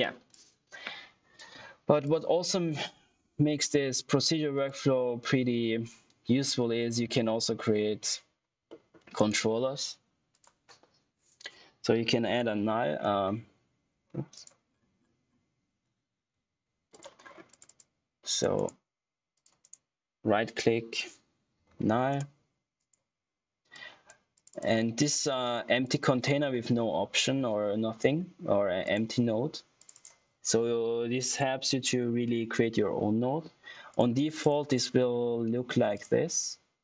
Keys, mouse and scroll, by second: 0.2 click, 2.3 click, 6.0 click, 8.6 middle click, 9.1 right click, 10.2 click, 12.1-13.4 typing, 14.2 click, 14.9-15.2 scroll down 1, 15.2-16.1 scroll up 1, 16.2 ctrl+z, 16.8 click, 17.1 scroll up 1, 17.4 click, 18.5 right click, 21.2-22.3 typing, 22.7 click, 23.1 scroll up 1, 23.6 click, 28.7 click, 33.8 click.